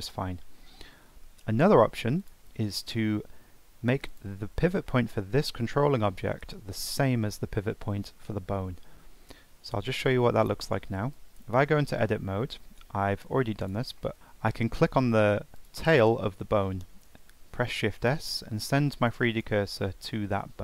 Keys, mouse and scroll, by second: 0.3 ctrl+z, 0.6 ctrl+z, 1.6-2.2 middle drag, 2.2 click, 2.7-4.1 shift+middle drag, 4.1 click, 4.9-6.8 middle drag, 6.8 click, 11.1 Tab, 11.8-12.4 scroll up 4, 12.4 shift+middle click, 12.7-13.6 scroll up 3, 13.6 click, 14.0 middle click, 14.2-15.5 scroll up 1, 15.5 click, 17.8 shift+s.